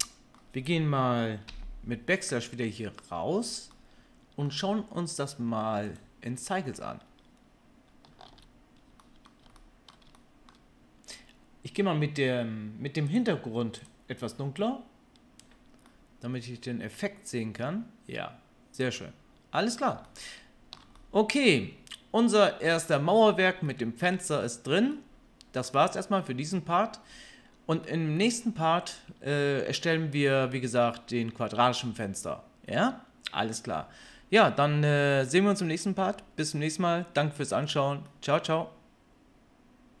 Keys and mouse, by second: 8.3 alt+a, 13.0 click, 13.2-13.7 middle drag, 13.7 click, 13.9-40.0 middle drag.